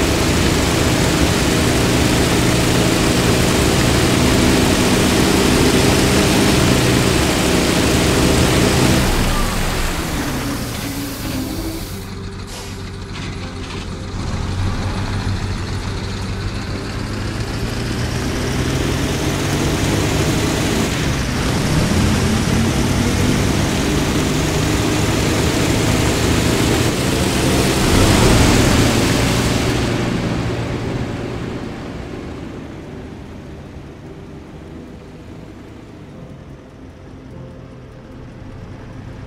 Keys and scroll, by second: 8.8 a, 9.5 s, 10.7 q, 10.9 a, 14.6 a, 17.1 w, 20.8 e, 21.1 a, 23.4 a, 27.7 w, 31.0 a, 38.0 w, 39.0 a.